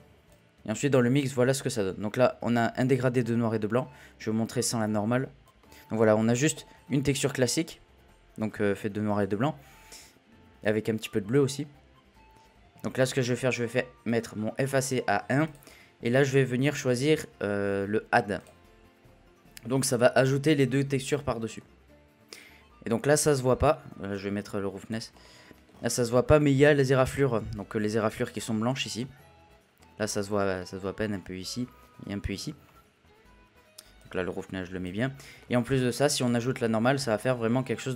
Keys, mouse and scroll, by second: 0.3-1.5 drag, 1.5 scroll down 1, 1.8-3.8 middle drag, 3.8-4.3 scroll down 1, 4.3 scroll down 1, 4.5 middle click, 4.7-5.4 scroll up 1, 5.4 scroll down 2, 5.6-6.0 middle drag, 6.0-6.5 scroll up 2, 6.5 scroll up 1, 6.7-9.1 middle drag, 9.1-9.7 scroll down 1, 9.7-10.5 scroll down 1, 10.5 scroll down 1, 10.6 click, 12.4-14.0 middle drag, 14.0-18.5 drag, 21.6-24.1 middle drag, 24.1-25.2 drag, 25.2-25.6 middle drag, 25.6-26.6 scroll up 4, 26.6-26.9 scroll down 1, 26.9-31.5 middle drag, 34.0-35.3 drag, 35.3 scroll down 1, 35.4-36.3 middle drag, 36.3 drag.